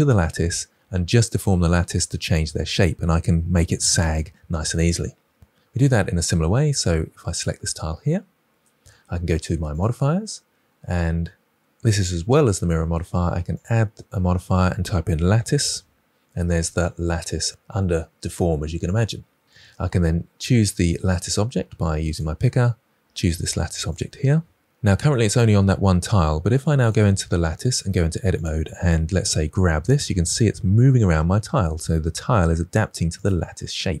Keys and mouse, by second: 9.7 click, 13.5-18.9 drag, 15.6 t, 27.8 Tab, 28.3 click, 29.1 g.